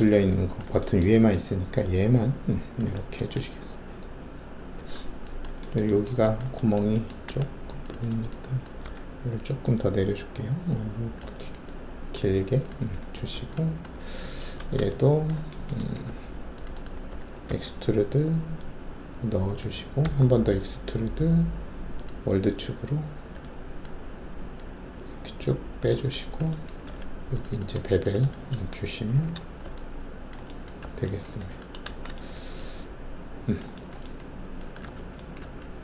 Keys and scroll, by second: 7.2 alt+2, 8.8 alt+w, 13.3 alt+`, 14.6 alt+shift+a, 16.0 2, 17.5 alt+w, 20.0 alt+w, 26.8 alt+2, 29.1 shift+b, 30.7 alt+`, 31.8 alt+shift+a, 34.8 w, 35.4 alt+`.